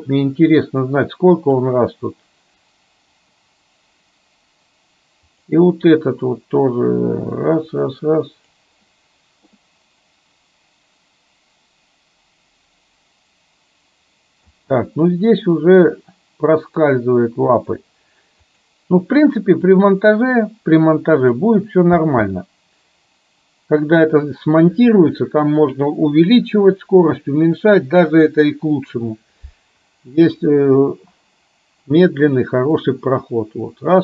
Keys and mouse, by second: 1.7-3.4 drag, 6.9-8.6 drag, 14.5 space, 15.8-17.7 drag, 19.8-21.4 drag, 22.1 space, 32.8-34.0 middle drag.